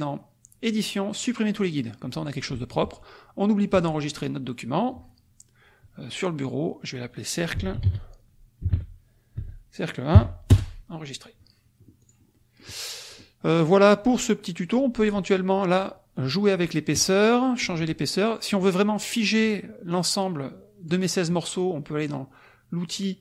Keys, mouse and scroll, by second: 1.5 click, 2.0 click, 3.7 click, 7.3-10.1 typing, 10.5 Return, 12.0 click, 12.3 middle click, 13.0 click, 13.6 middle click, 14.8 middle click, 19.9-21.0 drag.